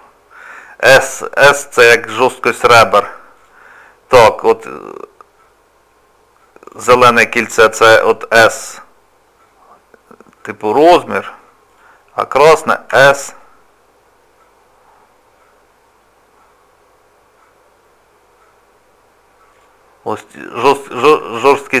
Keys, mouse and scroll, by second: 1.2 shift+middle click, 3.4 click, 6.6 click, 7.7 s, 11.7 click, 12.9 s, 20.7 shift+middle click, 21.4-21.8 scroll down 1.